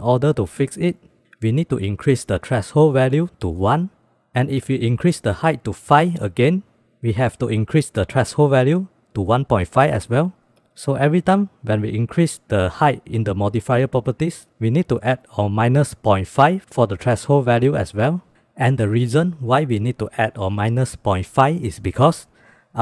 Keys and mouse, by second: 2.9 click, 7.2-10.1 drag, 18.4 middle click, 19.1 shift+middle drag, 20.1 shift+middle click.